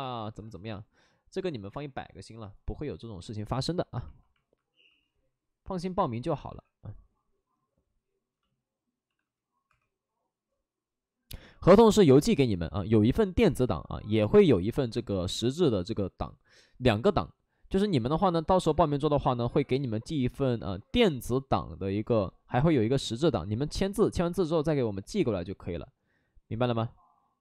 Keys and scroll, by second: 4.8 w, 6.4 2, 8.4 shift+f, 9.0 shift+f, 9.6 2, 13.1 alt+s, 13.5 alt+s, 15.4 alt+s.